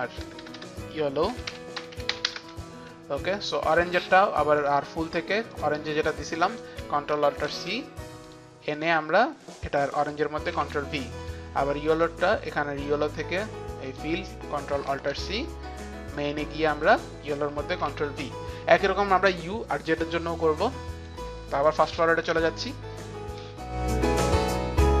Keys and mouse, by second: 0.0 Right, 0.4 Right, 0.4 Return, 0.4 ctrl+Up, 0.4-2.9 typing, 3.7 click, 4.5-5.2 typing, 4.7 click, 5.6 click, 6.5 Return, 6.5 click, 6.6 click, 7.5 ctrl+alt+c, 8.3 click, 8.9 click, 10.6 ctrl+v, 10.6 ctrl+alt+c, 10.6 click, 11.3 ctrl+v, 11.3 ctrl+alt+c, 11.3 click, 12.1 ctrl+v, 12.1 click, 12.9 click, 13.3 ctrl+v, 13.3 click, 14.0 ctrl+v, 14.0 click, 14.9 click, 15.2 ctrl+alt+c, 15.2 click, 17.9 ctrl+v, 20.7 click, 23.8 Page_Down, 23.9 click, 24.1 Return, 24.1 click, 24.2 click, 24.3 shift+click, 24.4 Up, 24.4 shift+click, 24.4 click, 24.5 click, 24.6 click, 24.7 click, 24.7 shift+Page_Down, 24.7 click, 24.8-25.0 typing, 24.8 click.